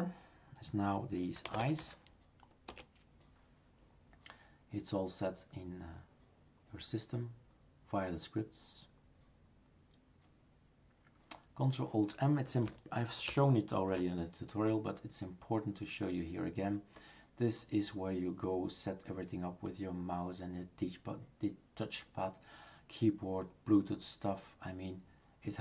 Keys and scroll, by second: 1.1-2.7 typing, 2.7 Return, 13.3 ctrl+alt+m.